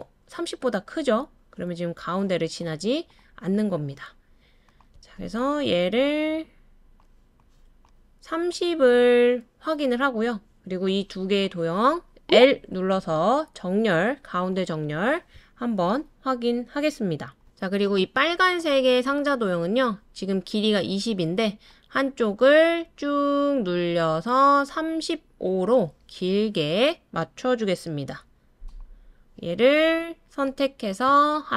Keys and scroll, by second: 12.9 l.